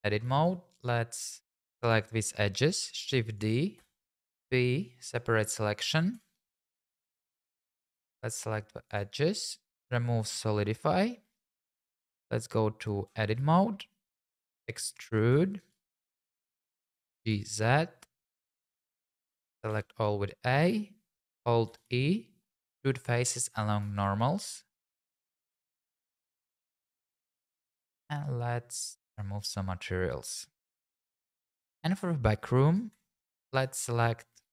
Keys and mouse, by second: 0.7 click, 1.8 shift+click, 3.0 shift+d, 3.3 right click, 3.8 p, 6.1 Tab, 7.6 click, 12.0 Tab, 13.4 a, 15.3 e, 17.0 g, 17.3 z, 18.5 click, 19.7 a, 21.7 alt+e, 25.7 shift+click, 26.9 Tab, 27.7 click, 29.4 click, 30.6 click, 32.7 click, 32.9 Tab, 33.3 click, 33.7 shift+click, 34.0 middle click, 34.4 Tab.